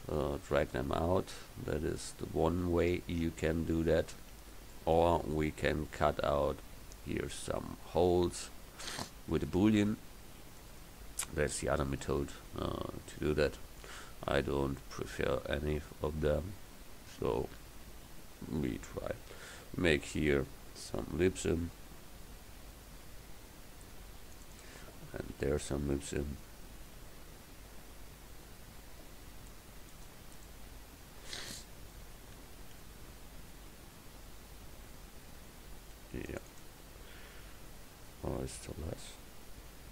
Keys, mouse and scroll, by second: 5.5-9.6 middle drag, 9.7-16.2 middle drag, 19.3 ctrl+r, 25.3 ctrl+r, 30.5-32.2 middle drag, 32.6 ctrl+r.